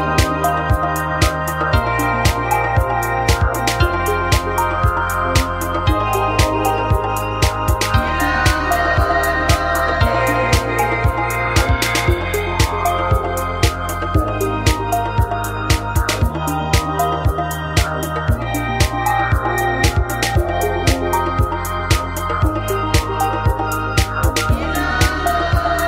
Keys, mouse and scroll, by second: 0.2 o, 4.3 alt+h, 4.6 Tab, 5.6 alt+h, 6.9-8.1 right drag, 7.9 click, 7.9 middle click, 9.9-12.5 middle drag, 12.5 KP_1, 13.5 shift+d, 13.7 click, 14.6 click, 16.8 shift+d, 16.9-18.0 drag, 19.4 shift+d, 19.6 click, 21.0 shift+d, 21.5 click, 22.6 shift+d, 23.4 click, 23.8 click, 24.6 shift+d, 24.8 click.